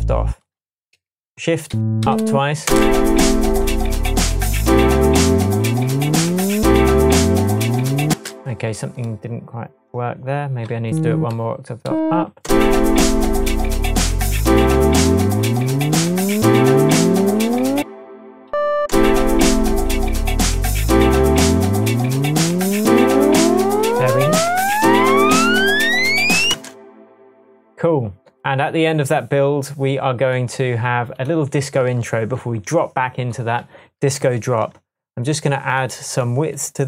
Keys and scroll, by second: 1.7 Up, 2.6 space, 3.2 space, 3.6 Tab, 8.1 space, 11.8 Up, 12.4 space, 13.1 space, 17.7 space, 18.3 shift+space, 18.5 shift+Up, 18.9 shift+space, 19.7 space, 24.3 shift+Tab, 26.5 space.